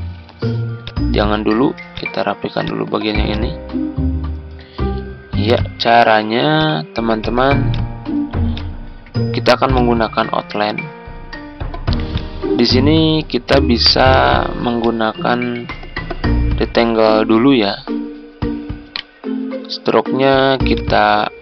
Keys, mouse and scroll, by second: 6.5-17.0 drag, 8.8 z, 18.9 right click, 20.7 click.